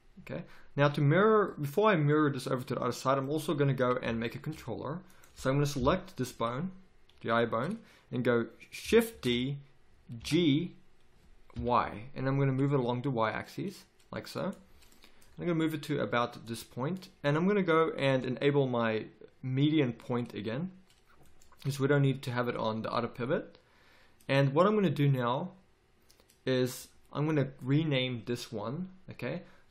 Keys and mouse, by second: 5.0 right click, 5.7 KP_3, 6.1 z, 9.1 shift+d, 14.9 middle click, 15.2 z, 16.4-18.6 drag, 18.8 click, 24.8 click.